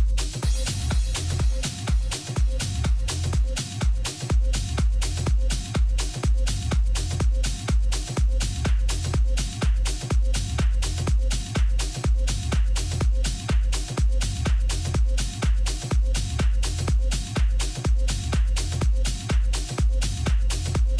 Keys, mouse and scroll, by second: 0.0 z, 2.7-4.7 right drag, 4.1 click, 4.5-6.0 middle drag, 5.0 z, 6.2 z, 6.7-8.7 middle drag, 12.0 a, 12.7-14.6 middle drag, 17.3-19.1 middle drag, 19.5-20.9 middle drag.